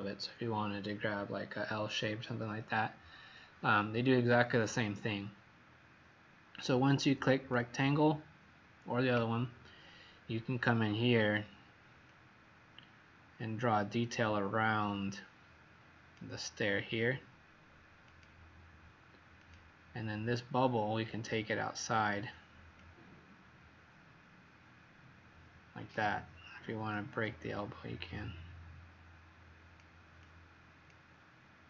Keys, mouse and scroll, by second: 9.7-11.0 scroll up 12, 12.1 click, 20.8-21.5 scroll down 6, 21.6 scroll down 1, 22.7 click.